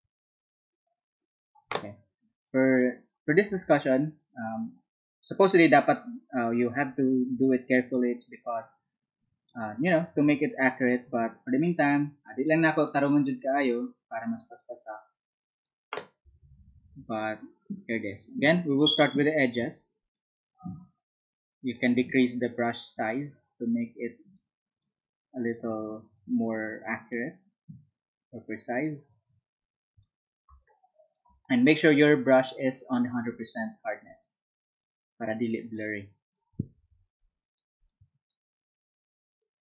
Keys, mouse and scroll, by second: 3.6 ctrl+z, 15.4-17.6 drag, 26.3-36.2 drag, 36.2 space, 37.9-39.6 drag.